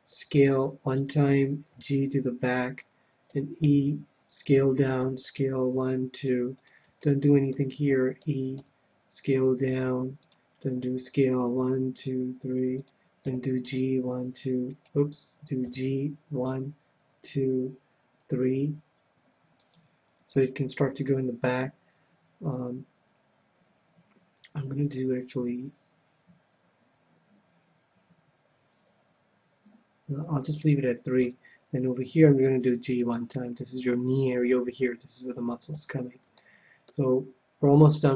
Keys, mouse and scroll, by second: 0.1 s, 1.7 g, 3.4 e, 5.3 s, 6.6-8.4 drag, 7.0-8.9 middle drag, 8.5 e, 10.3-12.0 drag, 11.0 s, 12.9-14.7 drag, 13.2 g, 14.9-16.6 right drag, 15.6 g, 16.8 g, 19.7-21.2 drag, 25.3 g, 30.6-32.1 drag, 31.2 KP_1, 32.1 g, 33.1-35.0 drag, 35.7 KP_3, 36.3-38.1 middle drag.